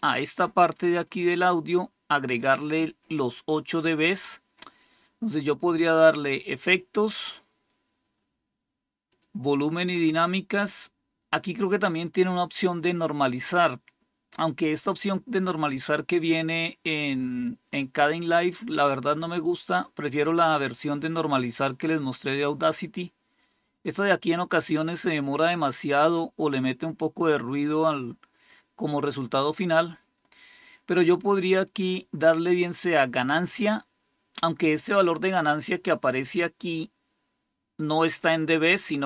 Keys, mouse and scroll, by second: 5.7 click, 6.4-8.0 scroll down 3, 9.0 click, 10.3 scroll down 2, 11.0-11.8 scroll down 1, 34.7-36.3 drag.